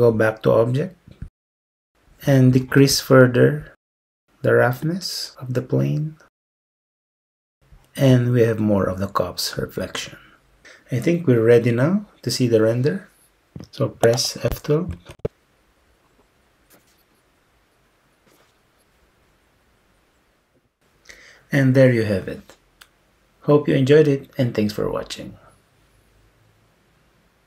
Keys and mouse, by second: 1.3-1.9 drag, 4.8-6.8 drag, 7.0 click, 15.1 F12.